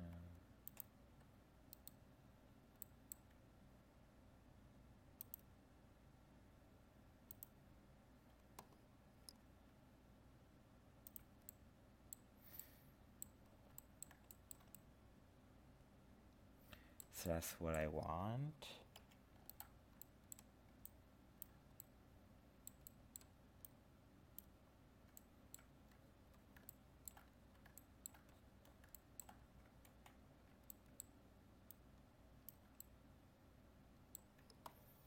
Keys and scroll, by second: 29.9 ctrl+z.